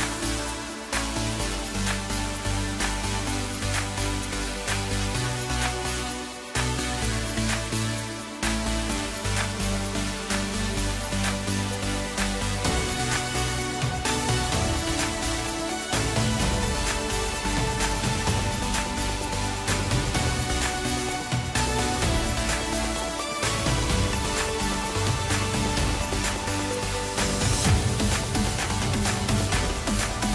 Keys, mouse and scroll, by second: 2.7 s, 6.4 s, 8.3 ctrl+r, 13.8-16.8 drag, 17.0-17.6 scroll down 3, 17.6-18.8 middle drag, 18.8-19.1 scroll up 2, 19.1-21.2 middle drag, 21.2-22.0 scroll up 2, 22.0-22.3 scroll down 2, 22.3-24.6 middle drag, 24.6-26.1 scroll up 2, 26.1 click, 26.7 click, 26.9 click, 27.6-28.9 middle drag, 28.9 shift+click, 29.1 shift+click, 29.6-30.0 scroll down 1, 30.0-30.3 middle drag.